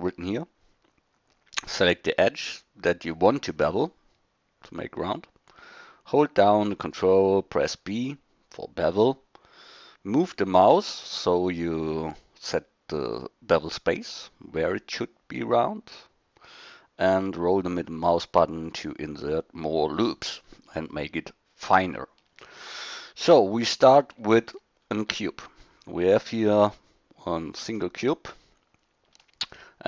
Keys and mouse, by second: 22.4-24.3 drag, 24.4 drag, 24.8 click, 24.9 middle drag, 25.5 middle click, 25.9-26.5 middle drag.